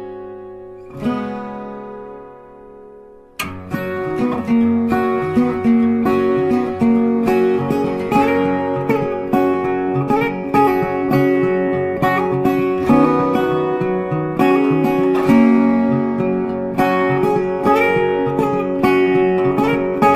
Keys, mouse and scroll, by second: 0.4 double click, 0.5 ctrl+space, 0.6 ctrl+click, 5.5 ctrl+space, 5.5 click, 5.7 ctrl+space, 7.5 ctrl+space, 7.6 ctrl+click, 7.8 ctrl+space, 8.2 ctrl+click, 8.5 ctrl+click, 9.3 alt+click, 11.1 shift+click, 13.2 alt+click, 14.5 shift+click, 16.2 ctrl+space, 16.3 ctrl+click, 16.5 ctrl+space, 18.0 ctrl+click, 18.4 space.